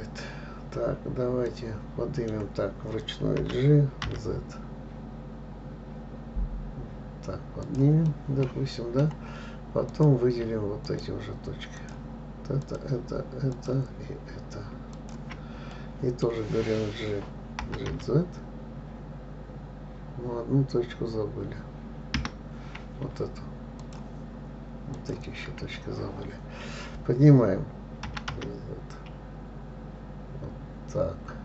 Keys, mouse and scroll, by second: 1.9-3.8 middle drag, 3.8 g, 8.5-10.3 middle drag, 10.3 click, 11.3 shift+click, 12.2 shift+click, 13.0 shift+click, 13.9 shift+click, 15.3 shift+click, 16.1-18.0 middle drag, 18.0 g, 24.2 shift+click, 25.3 shift+click, 28.4 g.